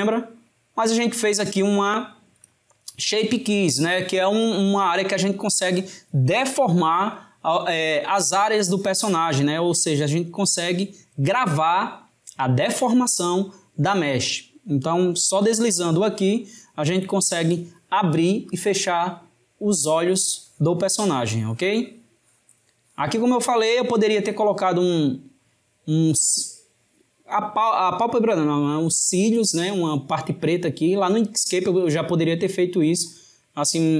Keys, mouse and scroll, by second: 15.0-17.9 drag, 18.5 click, 19.7-22.8 drag.